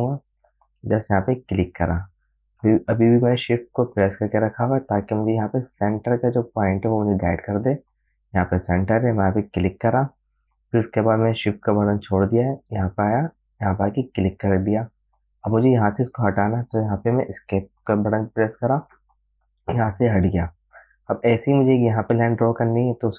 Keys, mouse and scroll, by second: 1.8 shift+click, 9.9 shift+click, 14.4 click.